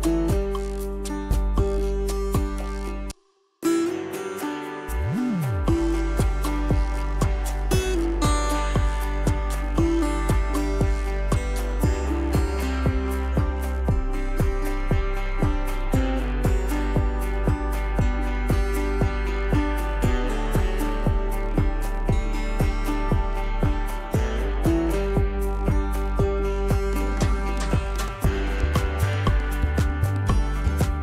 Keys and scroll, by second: 1.5 ctrl+-, 1.6 ctrl+-, 1.9 ctrl+-, 6.6 ctrl+=, 6.6 ctrl+=, 10.0 s, 12.7 ctrl+d, 15.9 ctrl+z, 18.2 ctrl+d, 19.1 ctrl+z, 19.4 ctrl+d, 19.8 ctrl+=, 22.7 ctrl+d, 23.1 ctrl+-, 23.4 ctrl+=, 23.7 p, 25.3 ctrl+z, 25.9 z, 27.1 ctrl+z.